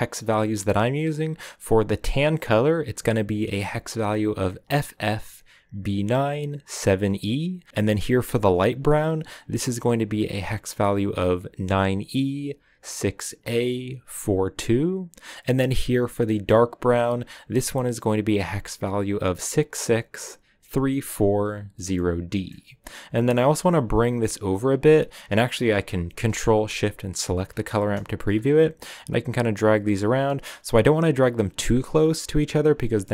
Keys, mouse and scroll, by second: 7.7-14.9 drag, 17.0-21.2 drag, 21.9-23.4 middle drag, 23.4-27.4 drag, 28.8-33.1 drag.